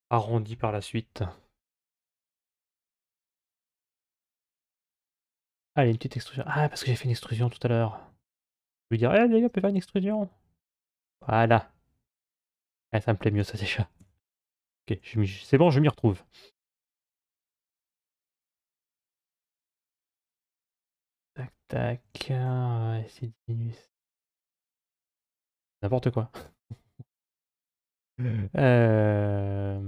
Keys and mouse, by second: 1.8 3, 5.3 e, 6.8 ctrl+z, 7.2 ctrl+z, 7.4 ctrl+z, 7.6 ctrl+z, 7.9 ctrl+z, 8.2 ctrl+z, 8.6 ctrl+z, 9.0 ctrl+z, 9.3 ctrl+z, 9.6 ctrl+z, 10.1 ctrl+z, 10.6 ctrl+z, 13.8 2, 15.2 g, 21.8 s, 26.5 middle click, 27.4 middle click.